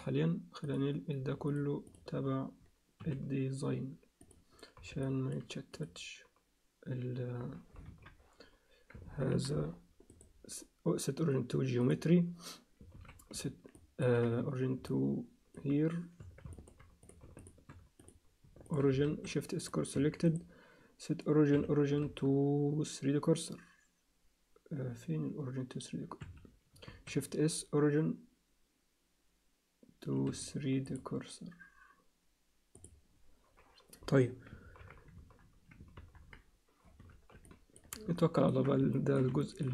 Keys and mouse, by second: 0.6 click, 1.5 shift+click, 3.0 m, 5.0 alt+middle click, 7.9 KP_3, 9.3 ctrl+KP_1, 10.1-11.9 right drag, 12.9 ctrl+z, 13.7 ctrl+alt+middle click, 14.9 alt+middle click, 16.2 Tab, 16.5 alt+middle click, 17.0 click, 18.7 shift+click, 19.0 shift+s, 19.9 Tab, 20.3-26.3 right drag, 22.0 shift+s, 26.8 shift+s, 31.0-32.8 drag, 34.6 ctrl+KP_3, 35.2 KP_1, 36.0 ctrl+KP_1, 37.0 z, 37.4 ctrl+alt+middle click, 38.2 ctrl+middle click, 38.3 ctrl+alt+click, 38.4 ctrl+alt+middle click, 38.4 z, 38.9 shift+middle click, 39.1 alt+shift+click, 39.4 ctrl+alt+middle click.